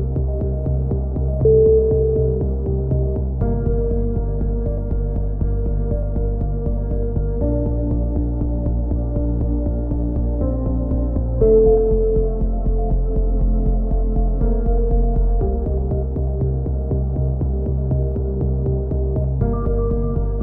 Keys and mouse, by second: 1.5 ctrl+r, 2.9-4.9 drag, 3.2 a, 3.4 z, 4.7 k, 6.9 z, 7.2-8.9 drag, 9.1 b, 9.9-10.9 drag, 11.3 c, 11.9-12.9 right drag, 12.3 click, 13.8 a, 14.3 right click, 14.7 middle click, 15.2 click, 16.1 click, 16.5 a, 16.8-17.8 drag, 17.4 c, 18.9 click, 19.7 click.